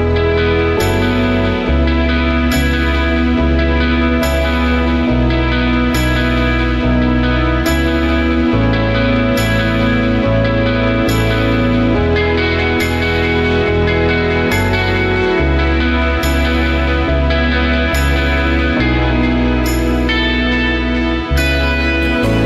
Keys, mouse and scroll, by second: 6.7 space, 8.8 alt+scroll up 1, 10.4 space.